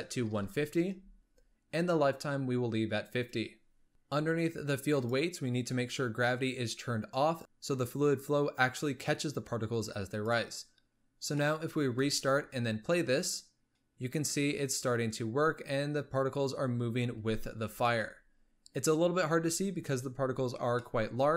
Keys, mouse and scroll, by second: 4.9-5.4 drag, 5.4-6.6 scroll down 4, 6.6-8.3 drag, 10.0 click, 11.0 scroll down 1, 11.3-11.9 middle drag, 11.9 space, 13.7-17.1 middle drag, 17.1 space, 17.3 z, 17.8-19.1 middle drag, 19.1-20.7 scroll down 1, 20.7-21.3 shift+middle drag.